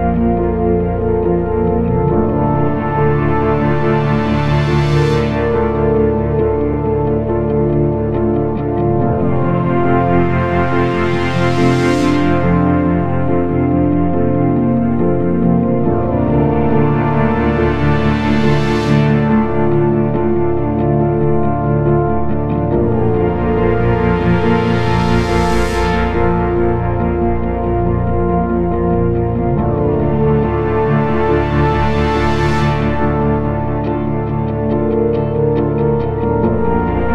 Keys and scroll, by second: 3.0 4, 7.1 F1, 11.2 F1, 12.4 ctrl+z, 15.0 ctrl+z, 15.3 4, 26.9 F1, 27.2 F2.